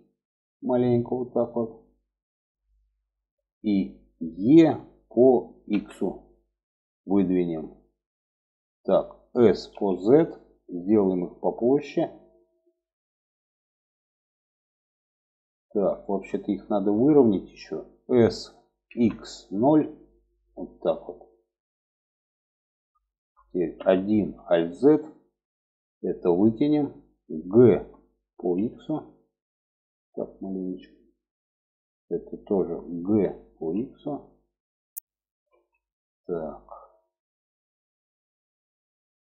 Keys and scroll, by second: 3.9 e, 8.5 s, 17.5 s, 23.1 1, 23.7 alt+z, 27.1 g, 32.4 g, 34.9 alt+z.